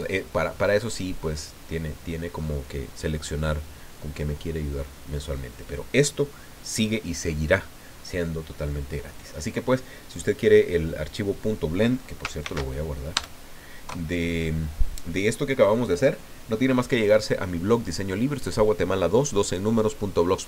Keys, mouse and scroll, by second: 12.4 ctrl+shift+s, 13.1 KP_Add, 13.8 KP_Enter.